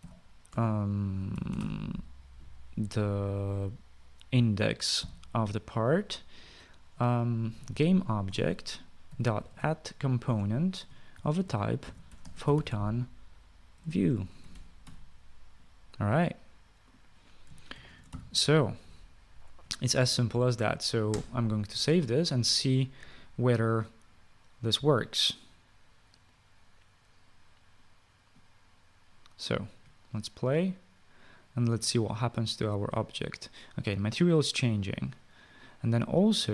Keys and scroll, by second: 0.0-2.8 typing, 5.5-6.3 typing, 8.1-16.1 typing, 9.1 Return, 11.1 Return, 18.3-19.0 typing, 21.9 ctrl+s.